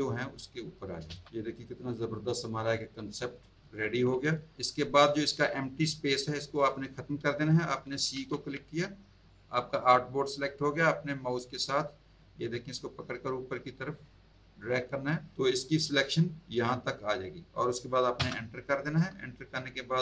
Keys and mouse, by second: 1.1 space, 1.1 click, 1.2 z, 1.5 click, 8.1 c, 11.2 click, 18.1 Return.